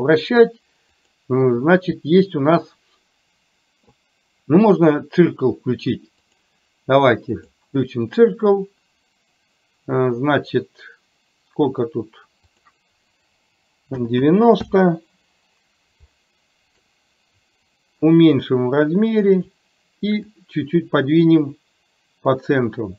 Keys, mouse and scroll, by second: 1.0-6.5 drag, 7.5 click, 12.5-15.0 drag, 16.2-16.8 middle drag, 18.0-19.6 drag, 20.3-22.9 drag.